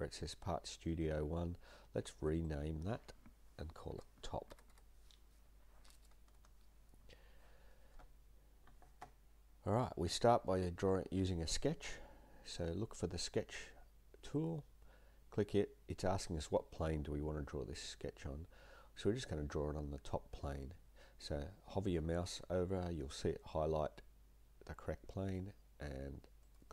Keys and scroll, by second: 3.9-5.5 typing, 6.3 Return, 15.5-16.2 typing.